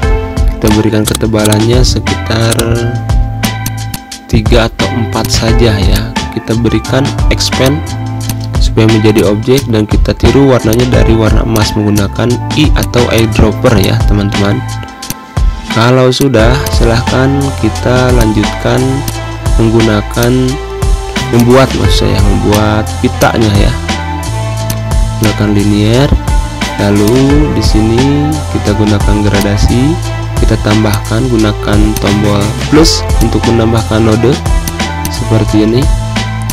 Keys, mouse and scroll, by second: 0.3 click, 3.5 space, 3.6 click, 3.8 space, 5.0 click, 7.4 click, 8.6 z, 8.9 click, 9.2 space, 9.4 click, 9.5 space, 10.1 i, 10.4 click, 11.9 z, 12.1 click, 12.7 space, 12.8 click, 13.0 space, 13.5 click, 14.2 ctrl+End, 14.6 z, 14.8 click, 15.6 z, 15.9 click, 16.1 space, 16.3 click, 16.5 space, 18.9-21.1 drag, 21.6 i, 22.2 click, 24.3 click, 26.2 typing, 26.7-28.5 drag, 28.5 Pause, 29.7 =, 30.6 click, 31.2 a, 31.6-36.5 drag.